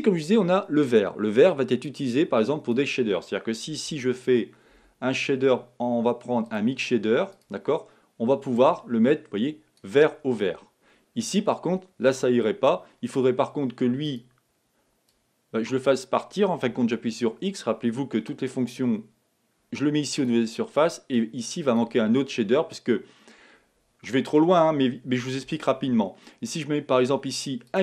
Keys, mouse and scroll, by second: 10.7 click, 14.5 click, 17.0 x, 20.3 click, 21.1 click.